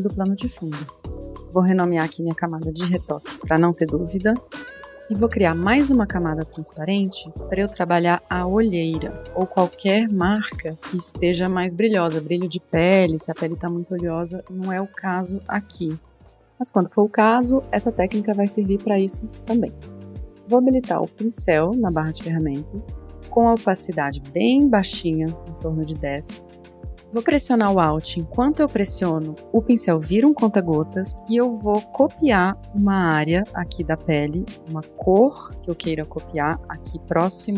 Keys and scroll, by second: 3.1-4.7 typing, 9.9-11.3 typing, 14.9-15.6 typing.